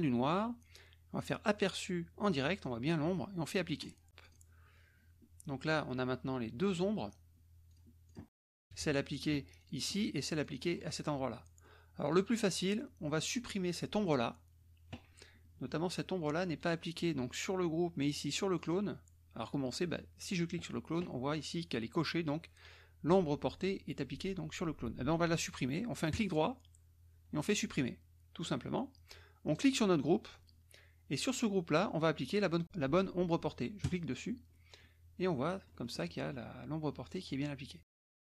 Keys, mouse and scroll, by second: 1.6 click, 3.8 click, 4.2 click, 7.7 click, 8.0 click, 8.6 KP_Subtract, 9.6 click, 10.5 click, 11.3 middle click, 12.1 click, 13.2 click, 18.0 click, 18.5 click, 20.3 click, 26.1 right click, 27.7 click, 29.5 click, 33.8 click, 34.5-36.0 scroll up 4, 36.1 click, 37.0 click, 37.8 click.